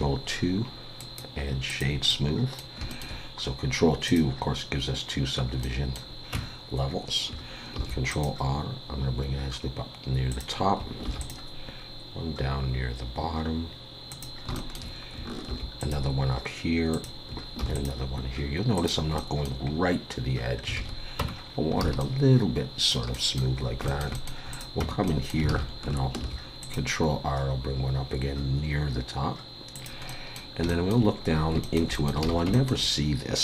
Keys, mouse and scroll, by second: 0.0 ctrl+2, 1.0 right click, 2.1 middle click, 2.9 shift+middle click, 4.1 click, 5.6 middle click, 6.3 Tab, 7.7 ctrl+r, 11.0 ctrl+r, 14.5 shift+middle click, 15.4 ctrl+r, 17.6 ctrl+r, 19.1 middle click, 19.6 scroll up 2, 20.7 alt+a, 21.2 Tab, 21.5-21.8 scroll down 2, 21.8 alt+a, 22.0 middle click, 23.1 middle click, 23.6 scroll up 2, 23.8 shift+middle click, 24.1 middle click, 24.5 click, 24.8 Tab, 25.1 middle click, 25.5 alt+a, 26.2 ctrl+r, 30.1 middle click, 30.7 shift+middle click, 31.4 scroll up 2, 31.6 shift+middle click, 31.9 middle click, 32.2 alt+a, 32.5 shift+middle click.